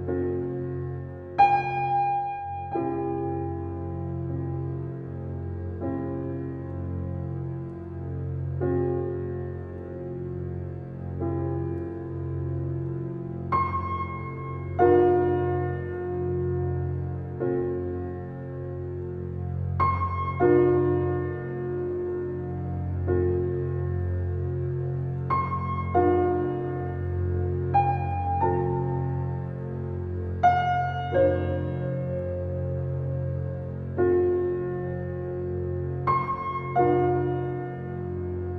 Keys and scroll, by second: 1.4 ctrl+t, 15.7 ctrl+l.